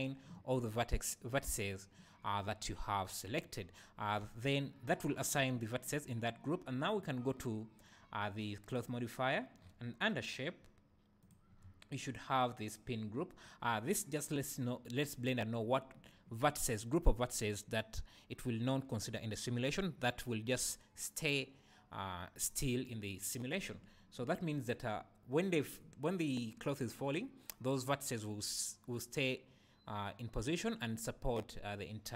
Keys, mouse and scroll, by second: 0.0 click, 4.2 Tab, 4.4 Tab, 8.7 click, 9.6-11.2 scroll down 1, 11.2 click, 11.6-14.6 scroll down 1.